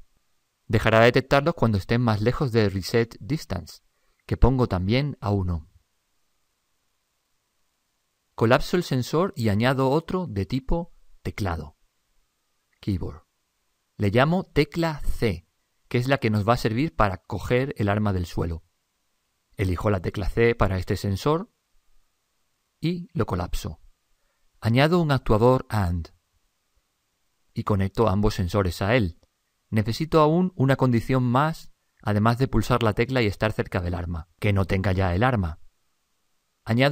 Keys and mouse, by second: 4.4 click, 9.7 click, 12.0 click, 16.6 BackSpace, 16.7 BackSpace, 20.3 click, 23.4 click, 26.2-31.3 drag, 35.6-36.9 middle drag.